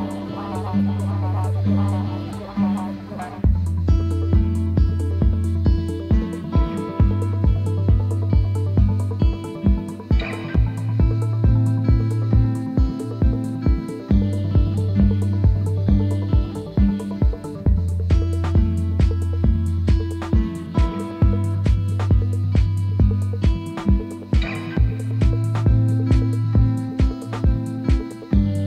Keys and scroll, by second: 22.3 ctrl+e, 26.8 ctrl+t.